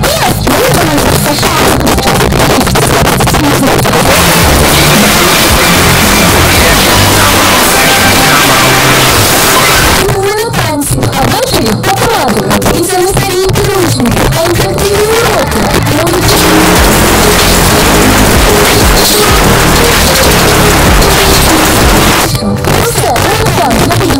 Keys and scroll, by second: 0.0 Down, 0.2 Down, 0.4 Down, 0.7 Down, 0.8 Down, 1.3 Return, 9.9 Page_Down, 22.1 Page_Down.